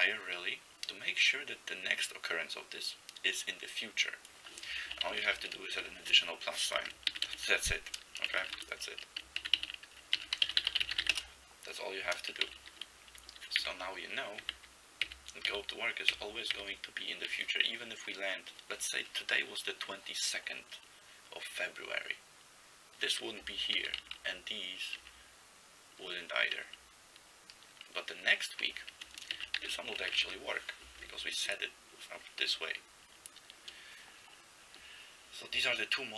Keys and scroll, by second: 5.2 ctrl+b, 5.3 ctrl+b, 7.2 ctrl+x, 7.3 ctrl+s, 8.4 ctrl+x, 8.5 0, 9.4 ctrl+x, 9.6 ctrl+s, 10.1-11.5 typing, 12.6 a, 13.7-16.6 typing, 23.8 b, 24.0 b, 24.2 b, 25.0 f, 26.6 b, 29.4 ctrl+x, 29.6 k, 30.2 ctrl+x, 30.3 0.